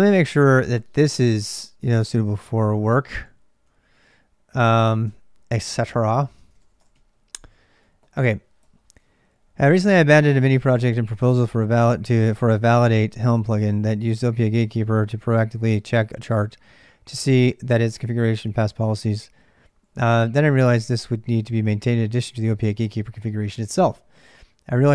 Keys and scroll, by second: 0.0-24.9 typing.